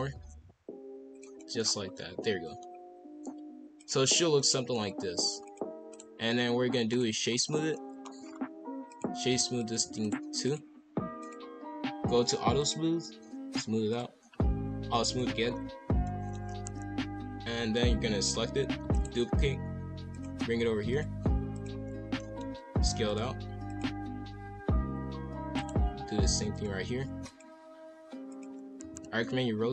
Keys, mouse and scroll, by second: 0.4 s, 1.4 middle click, 1.6 scroll down 1, 1.9 middle click, 2.7-3.2 scroll up 2, 3.7 click, 4.5 middle click, 4.7 scroll up 1, 5.4 click, 5.9-7.5 right drag, 7.5 scroll up 2, 7.7 middle click, 8.2-8.9 scroll down 2, 8.9 click, 9.6 shift+click, 10.0-11.2 right drag, 11.2 click, 12.6 click, 13.9 click, 15.1 click, 15.4 scroll down 5, 15.8 scroll up 2, 16.0 middle click, 16.5 KP_5, 16.6 KP_1, 17.5 b, 18.8 shift+d, 19.3 g, 20.4 r, 21.0 g, 22.2 shift+middle click, 22.6 s, 23.2 g, 24.2-24.9 scroll up 1, 24.9 scroll up 1, 25.3 shift+d, 25.9 g, 26.9 r, 27.7 s, 28.8-29.7 typing, 29.5 scroll up 1.